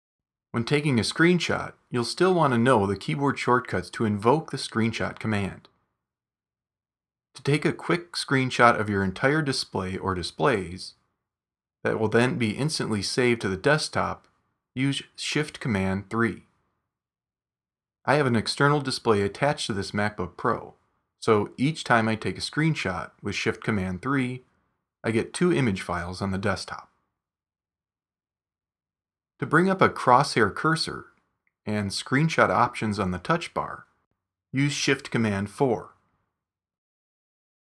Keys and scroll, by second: 0.1 super+h, 15.2 shift+super+3, 34.4 shift+super+4.